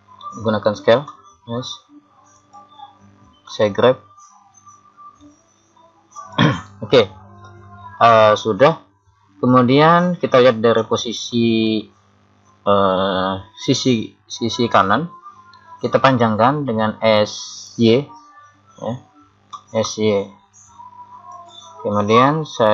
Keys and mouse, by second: 1.1 s, 3.5 g, 10.8 KP_3, 19.5 s.